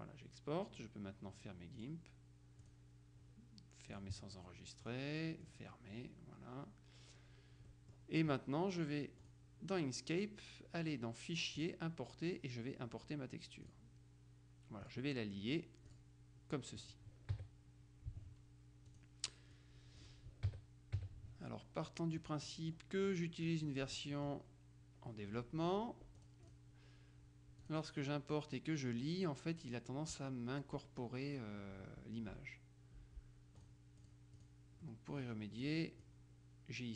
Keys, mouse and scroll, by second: 1.8 click, 2.7 click, 4.0 click, 4.9 click, 7.8 click, 9.4 click, 11.7 click, 13.8 click, 15.0 click, 15.6 click, 17.4 KP_Subtract, 19.0 click, 19.8 click, 20.6 KP_Subtract, 22.0 middle click, 23.2 click, 23.8 middle click, 24.6 click, 25.2 click, 26.2 click, 27.7 click, 33.7-35.0 drag, 35.7 click.